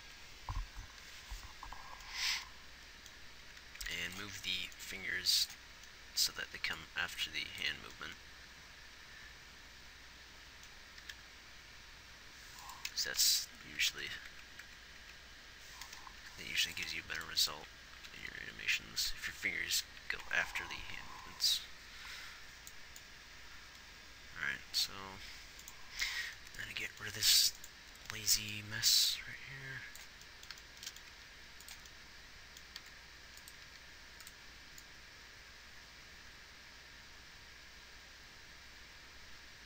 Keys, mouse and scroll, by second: 0.0 Right, 0.4 Right, 3.8 a, 4.1 b, 10.1 b, 10.3 Left, 10.3 Right, 11.5 g, 13.6 Left, 14.0 Right, 14.3 Right, 14.6 Right, 14.9 Right, 15.3 Right, 16.6 g, 17.9 Right, 18.3-18.8 Left, 19.4 Right, 19.8 Right, 20.2 Right, 20.6 Right, 31.6 g, 33.1 r, 34.0 g.